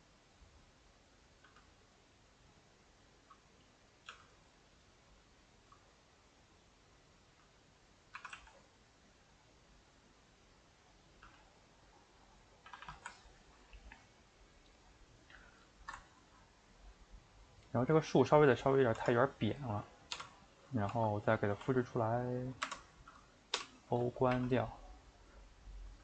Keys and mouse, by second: 4.1 g, 6.2 click, 6.3 middle click, 7.3 g, 7.8 middle click, 8.1 r, 11.2 g, 12.4 middle click, 12.7 a, 12.8 a, 13.1-14.8 ctrl+middle drag, 14.8 click, 14.9-15.7 middle drag, 15.7 shift+right drag, 16.0-18.2 ctrl+middle drag, 18.2 click, 18.6 click, 19.1 Tab, 20.1 l, 20.6 middle click, 20.9 shift+d, 21.6 s, 23.5 o, 24.3 r.